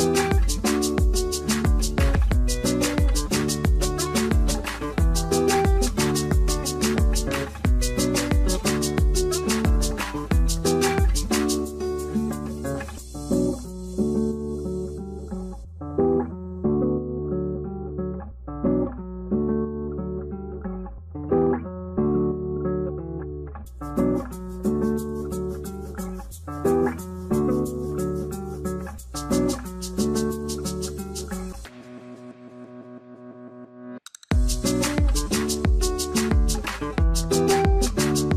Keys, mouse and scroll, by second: 1.1 middle click, 2.5 ctrl+click, 7.1 scroll up 1, 9.7 scroll up 1, 13.9 scroll up 1, 14.7 scroll down 1, 15.7 double click, 16.6 scroll down 1, 18.6-19.4 scroll down 1, 19.2-20.9 typing, 21.6 scroll up 1, 22.9 middle click, 23.4 alt+q, 24.0 middle click, 24.9 middle click, 27.8 shift+t, 30.1 ctrl+click, 31.2 right click, 33.2 double click.